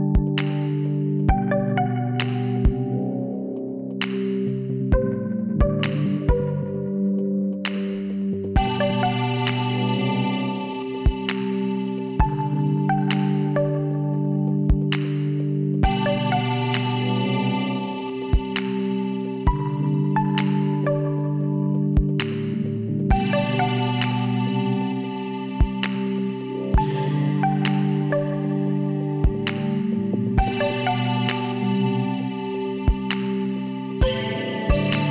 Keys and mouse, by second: 1.4-3.2 middle drag, 3.2 s, 3.5 click, 7.3 ctrl+z, 8.8 shift+s, 10.5 shift+a, 15.4 middle click, 15.9 KP_1, 18.0-19.8 drag, 18.7 z, 20.9 b, 24.4-27.1 drag, 26.4 b, 28.8-30.7 middle drag, 30.4 x, 32.7-34.4 drag, 33.7 l, 34.5 s.